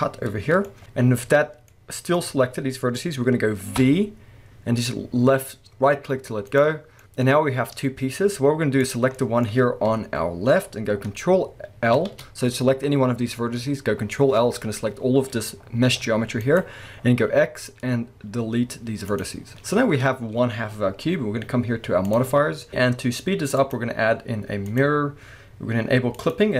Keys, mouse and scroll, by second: 0.8 KP_1, 3.8 v, 6.6 right click, 7.0-8.8 middle drag, 7.3-8.8 scroll down 2, 8.8 click, 9.2-16.6 middle drag, 9.9 KP_1, 11.9 ctrl+l, 12.8-15.9 scroll up 2, 15.9 g, 16.6 right click, 17.3-22.1 middle drag, 17.3 x, 22.1 click, 23.6-26.3 drag.